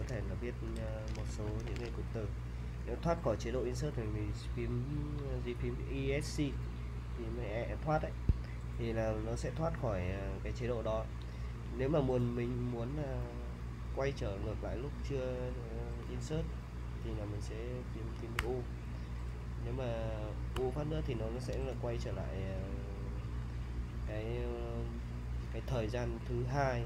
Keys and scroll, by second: 0.0-2.3 typing, 8.3 Escape, 18.4 typing, 20.5 u, 22.4 l.